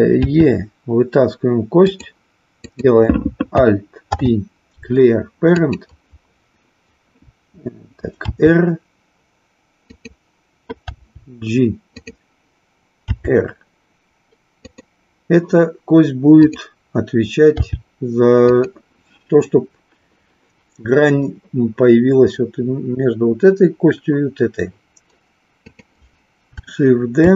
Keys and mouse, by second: 0.3 e, 2.6 click, 8.2 r, 14.7 click, 16.4 click, 17.6 g, 18.6 click, 25.6 click.